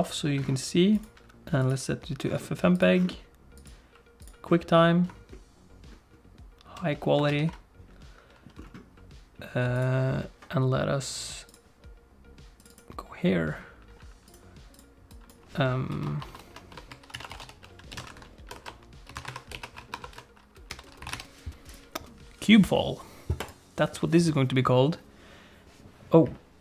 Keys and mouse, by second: 1.0 click, 3.6 click, 7.3 ctrl+s.